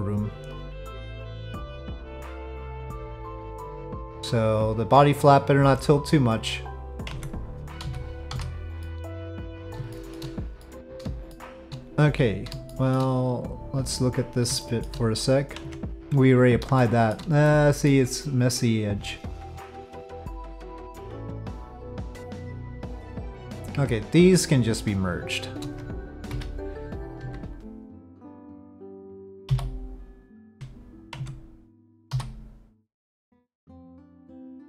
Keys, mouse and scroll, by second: 2.1 click, 3.4-6.9 drag, 7.1 Tab, 7.8 z, 8.8 click, 9.2 middle click, 9.9 shift+middle drag, 10.6-11.0 middle drag, 11.3 shift+drag, 12.7 shift+drag, 13.5 click, 14.6 shift+drag, 15.6 Tab, 16.8 shift+click, 17.5 click, 18.4 click, 19.5 click, 21.2 shift+middle click, 26.3 m, 27.4 c, 29.5 f, 30.5 Tab, 31.2 Tab, 32.1 3.